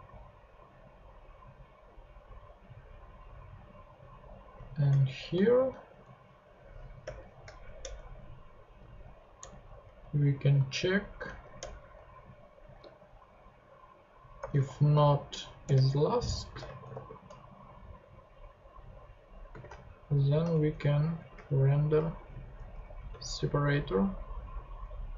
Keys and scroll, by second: 5.3 shift+super+Right, 7.0 shift+[, 7.5 shift+Left, 7.8 Return, 8.7 super+Return, 9.0 super+Left, 9.4 Return, 9.8 Up, 10.3 Right, 11.2 Left, 11.6 Return, 14.4 shift+i, 14.9 s, 15.6 Return, 16.5 space, 16.8 shift+7, 19.5 space, 20.0 shift+9, 20.6 shift+Return, 21.0 Down, 21.4 alt+shift+Up, 22.2 alt+shift+super+Up, 22.3 alt+shift+super+Left, 22.5 super+Tab, 22.7 Down, 23.0 super+x, 23.7 super+Tab.